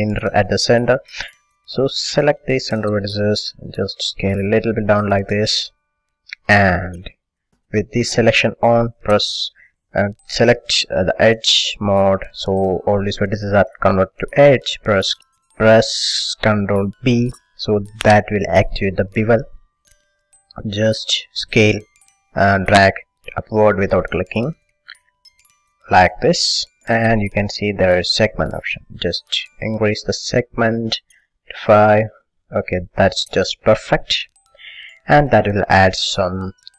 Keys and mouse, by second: 2.3 b, 4.0 s, 5.5-6.5 drag, 6.8 click, 7.0 click, 7.5-8.5 middle drag, 8.6-11.5 middle drag, 11.5-13.1 drag, 13.1-15.1 middle drag, 17.1 ctrl+b, 26.6-33.5 drag, 33.5 middle click, 33.8-35.3 middle drag, 34.4 a, 35.3-36.7 middle drag.